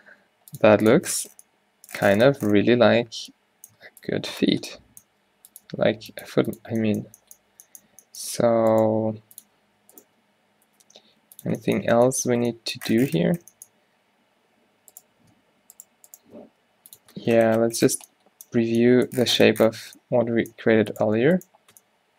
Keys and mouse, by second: 0.5 r, 1.1 g, 2.4 Tab, 3.1-6.5 typing, 7.6 z, 9.0-10.9 typing, 11.6 Tab, 14.2 Tab, 16.5 g, 17.1 Tab, 20.0 Tab.